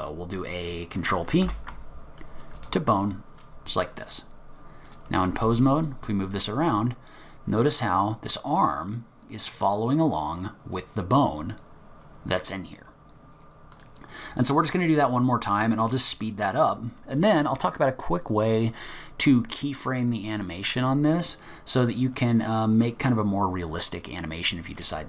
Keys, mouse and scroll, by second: 1.4 ctrl+p, 3.8-4.5 scroll down 1, 4.9 click, 5.3 g, 14.7-15.1 scroll down 3, 15.1-15.6 scroll up 3, 15.6-16.1 scroll down 2, 16.1-17.1 scroll up 1.